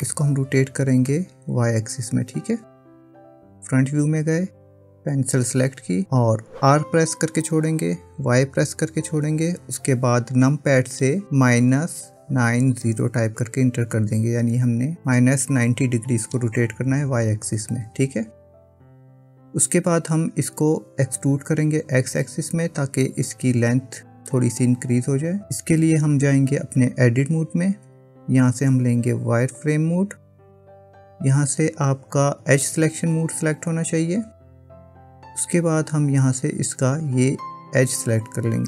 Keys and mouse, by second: 0.1-1.2 middle drag, 3.4 KP_1, 5.8 click, 7.5 r, 27.4 Tab, 29.8 click, 33.8 click, 36.6-37.8 drag.